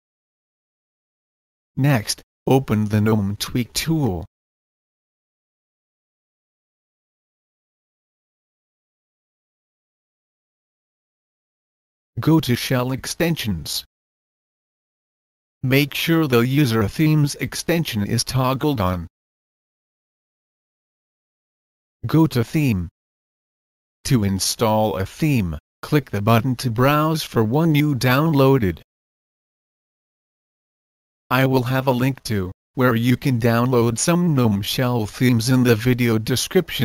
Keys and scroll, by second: 7.3 typing.